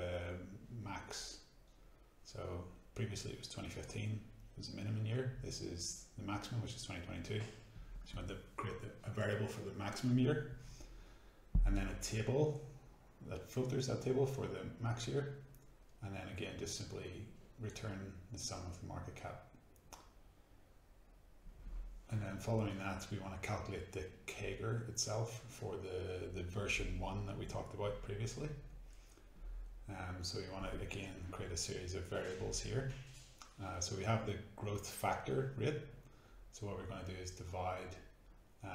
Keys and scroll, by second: 0.1-2.6 typing, 4.9 shift+a, 5.1 shift+x, 7.7 a, 10.7-11.6 typing, 13.6 Return, 16.6 F9, 19.8-20.8 typing, 21.9-26.8 typing, 27.0 shift+Return, 28.0-34.8 typing, 36.3 shift+m, 37.2 Tab, 38.1-38.7 typing.